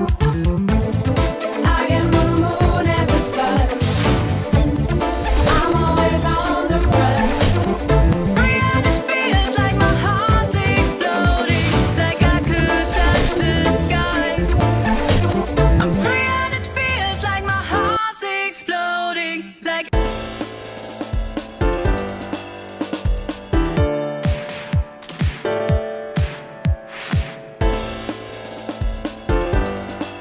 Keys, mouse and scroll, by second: 2.1-3.7 typing, 5.4-11.7 drag, 11.7 right click, 11.8-12.3 drag, 12.3 right click, 16.2 click, 17.5-20.1 drag, 21.2-23.4 drag, 24.5 click, 25.4-27.6 drag, 29.0-30.2 drag, 30.0-30.2 typing.